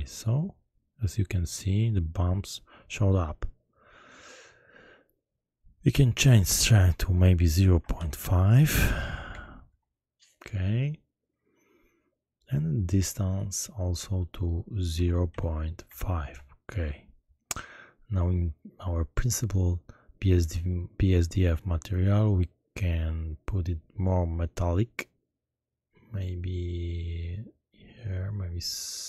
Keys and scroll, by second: 7.8 0, 7.9 ., 9.3 5, 9.7 Return, 15.0 0, 15.2 ., 15.8 5, 16.2 Return.